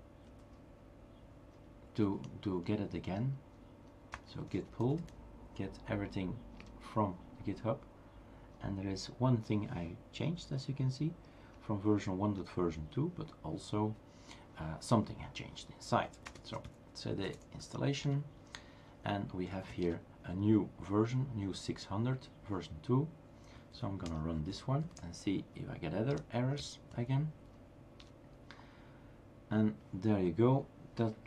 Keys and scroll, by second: 0.0-0.8 typing, 4.1 space, 6.0 typing, 6.6 Return, 15.9-17.2 typing, 18.0 Return, 19.0-20.9 typing, 23.5-24.3 typing, 25.6-27.1 typing, 28.0 Return.